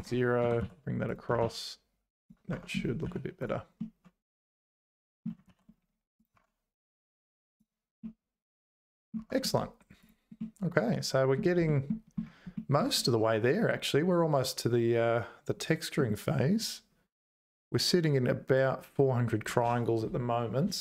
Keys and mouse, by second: 0.4 g, 1.4 ctrl+s, 2.2 click, 2.5 Tab, 3.1 z, 3.8-5.2 middle drag, 5.5 ctrl+s, 6.3 Tab, 8.7 middle click, 9.2 Tab, 10.4 middle click, 11.7 middle click, 12.5 shift+middle click, 12.9 middle click, 13.0-15.6 drag, 15.6 middle click.